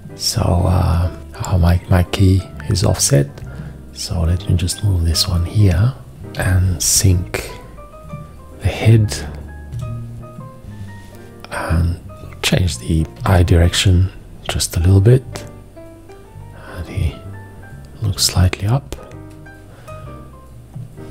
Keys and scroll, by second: 6.4 /, 9.8 F9, 13.2 g.